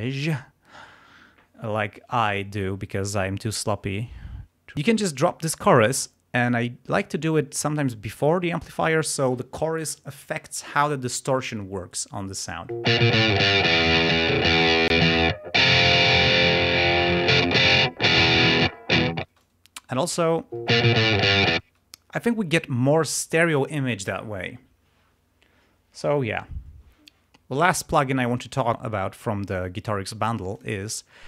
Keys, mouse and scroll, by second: 8.5 click, 12.7 space, 14.3 click, 19.2 space, 19.3 click, 19.7 click, 20.6 space, 21.6 space, 30.5 click.